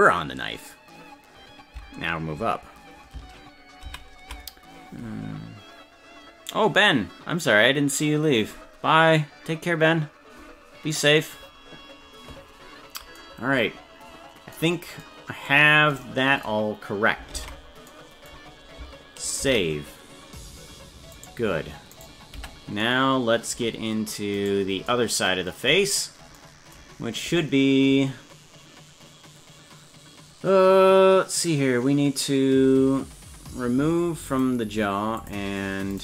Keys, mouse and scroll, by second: 4.0 ctrl+z, 17.4 ctrl+Tab, 19.8 ctrl+s, 21.2 right click, 22.1 right click, 22.4 Tab, 24.4 right click, 25.9-26.3 scroll down 2, 34.3 click, 35.2 click, 35.9 click.